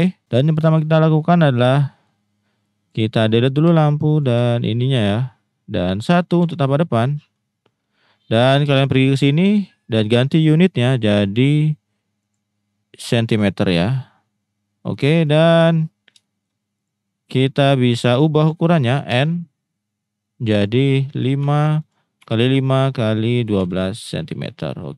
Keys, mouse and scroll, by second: 1.9 middle click, 2.6-3.6 drag, 3.6 Delete, 4.2 click, 4.3 Delete, 5.7 middle click, 6.4 KP_1, 9.1 click, 10.3 click, 12.3-15.4 drag, 16.2 shift+middle drag, 19.1 n, 20.7-22.5 drag, 22.8-23.8 drag.